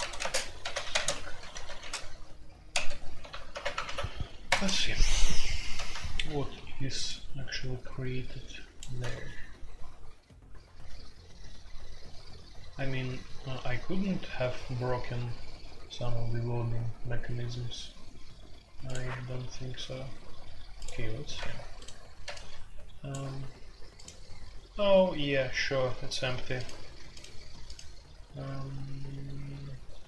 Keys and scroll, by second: 0.0-4.0 typing, 4.4 Return.